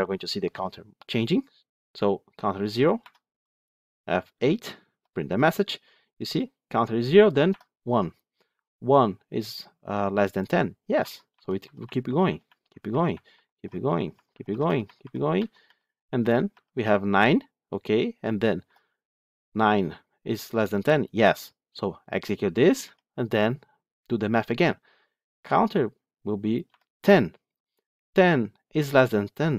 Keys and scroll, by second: 2.9 F8, 22.5 F8.